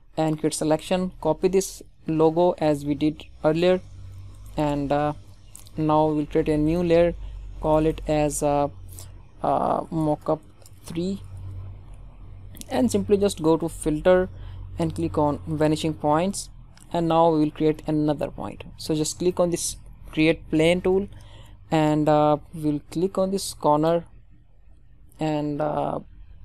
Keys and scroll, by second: 0.8 ctrl+c, 2.2 ctrl+d, 11.4 Return.